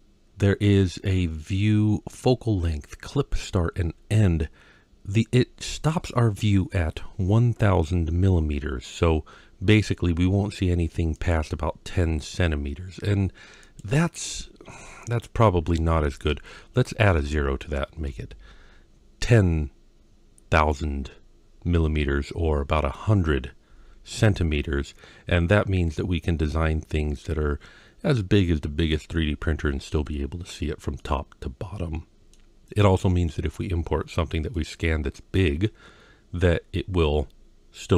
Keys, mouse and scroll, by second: 11.0-17.9 drag, 25.8-28.7 middle drag, 30.8-32.2 middle drag, 33.8-34.4 scroll down 2, 34.4-35.2 middle drag, 35.6-36.6 scroll up 1, 36.6-37.0 scroll up 2.